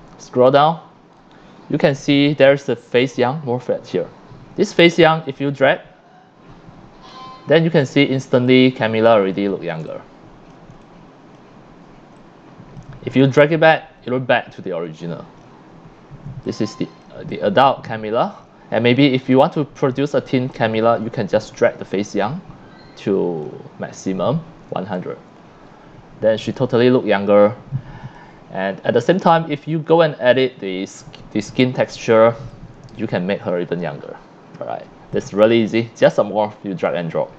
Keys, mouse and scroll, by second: 5.2-7.1 drag, 7.2 middle click, 8.2 c, 8.4-9.3 drag, 9.8 c, 9.9-10.6 drag, 10.7-11.4 drag, 10.7 c, 11.5 click, 11.6 scroll up 1, 12.1 c, 12.2-12.7 drag, 14.1-15.4 drag, 15.8 scroll down 1, 16.3 c, 16.5-17.0 drag, 17.3-18.4 drag, 17.4 c, 18.6 scroll up 1, 19.2 c, 19.3-20.5 drag, 21.1 click, 21.9-23.4 drag, 24.7 c, 24.9-28.1 drag, 28.5 1, 29.1 c, 29.3-29.8 drag, 30.6-31.4 drag, 32.0-32.3 drag, 32.4 c, 32.5-33.8 drag, 35.0 c, 35.1 drag, 36.9-37.3 drag.